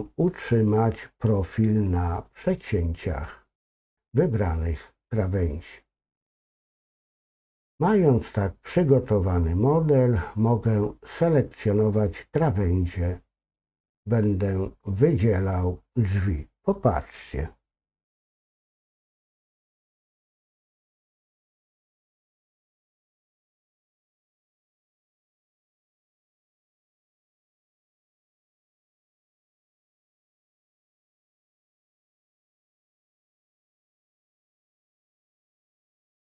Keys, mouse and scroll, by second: 9.4 scroll up 2, 9.5 middle click, 19.8 shift+click, 22.9 ctrl+click, 24.4-25.7 middle drag, 27.3 ctrl+click, 30.8 ctrl+click.